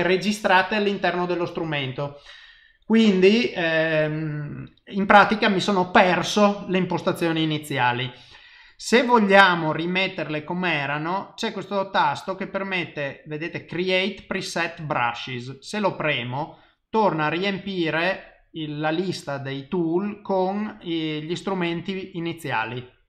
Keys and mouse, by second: 16.1 click, 17.6 click, 21.8 click, 22.6 click.